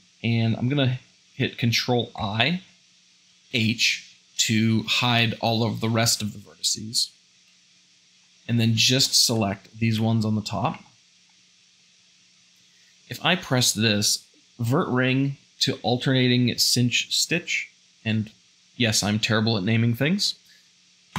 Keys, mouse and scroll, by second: 2.2 ctrl+i, 3.6 h, 7.5 a, 9.3 `, 10.8 shift+middle click, 11.3-13.3 shift+middle drag.